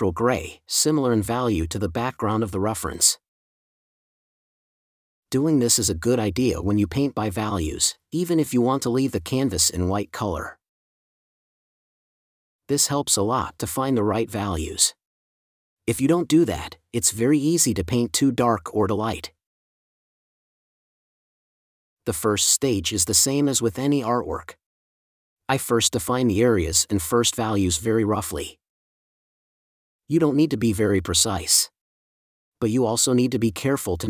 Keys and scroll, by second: 12.5 space, 16.0 super+z.